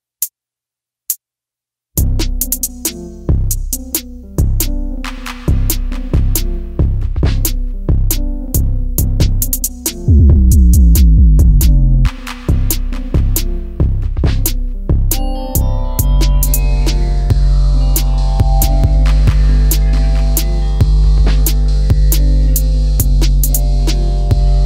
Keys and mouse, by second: 0.7-1.7 drag, 3.0 shift+a, 4.6 KP_7, 6.0-6.8 drag, 7.2 s, 8.0 click, 9.4 s, 9.6 x, 10.3 click, 10.8-11.5 drag, 12.0 ctrl+a, 13.4 Tab, 14.5 right click, 16.2 click, 18.1 ctrl+shift+b.